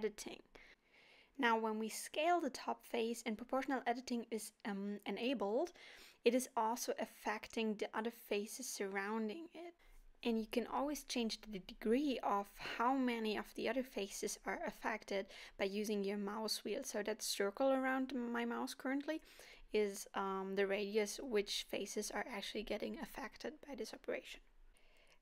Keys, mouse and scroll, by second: 8.7 s, 14.3 g, 20.5 scroll down 3, 21.0 alt+a, 21.3 middle click.